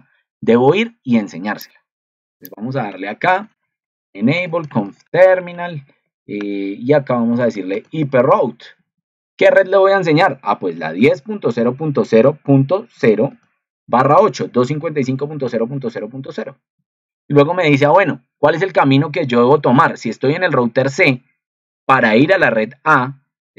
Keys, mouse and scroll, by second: 19.6 ctrl+2.